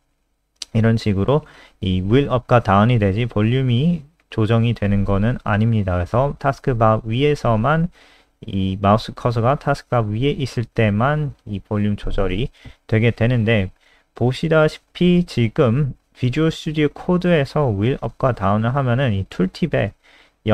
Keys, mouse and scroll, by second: 0.8-1.7 scroll up 8, 1.7 scroll down 2, 2.0-3.3 scroll up 4, 5.2-6.7 scroll up 10, 6.7-8.3 scroll down 7, 8.3 scroll down 1, 8.4-9.4 scroll up 2, 9.4 click, 16.0-17.0 scroll up 1.